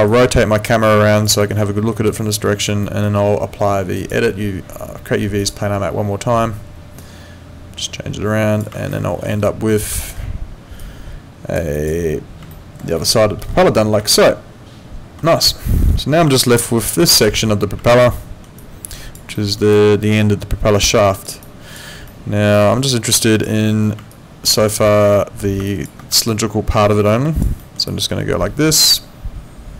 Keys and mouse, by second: 0.1 alt+click, 1.4 alt+middle click, 2.1 alt+click, 2.8 alt+middle click, 3.9 click, 5.4 click, 7.0 click, 8.9 alt+middle click, 10.0 alt+middle click, 10.8 click, 12.5 alt+middle click, 14.1 alt+middle click, 15.5 alt+middle click, 16.4 alt+middle click, 17.0 click, 18.1 alt+middle click, 18.6 alt+click, 19.3 alt+middle click, 19.7 alt+click, 21.4 alt+click, 22.1 alt+middle click, 22.5 alt+click, 24.1 alt+click, 25.7 ctrl+click, 26.3 alt+click, 27.6 alt+middle click, 27.9 alt+click.